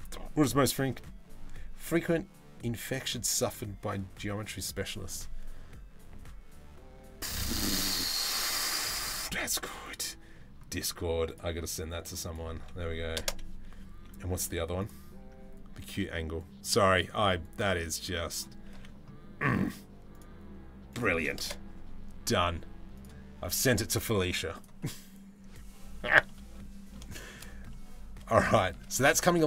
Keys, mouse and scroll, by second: 25.8 middle click, 26.7 shift+middle click, 27.3-27.9 middle drag, 28.8 shift+middle drag, 29.0 middle drag.